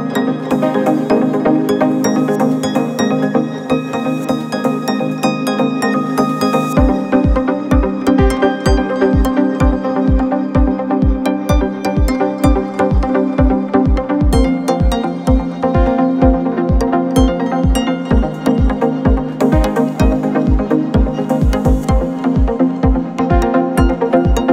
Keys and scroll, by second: 0.7 ctrl+=, 1.1 space, 6.4 ctrl+-, 6.7 space, 7.3 space, 11.4 ctrl+z, 19.4 ctrl+z, 21.5 space, 23.3 space.